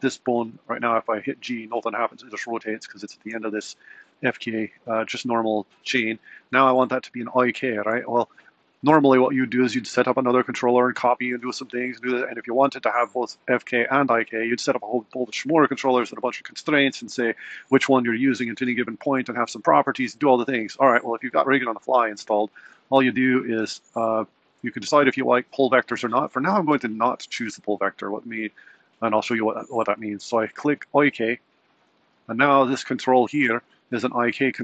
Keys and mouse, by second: 0.6 g, 24.7-31.8 drag, 32.8 click.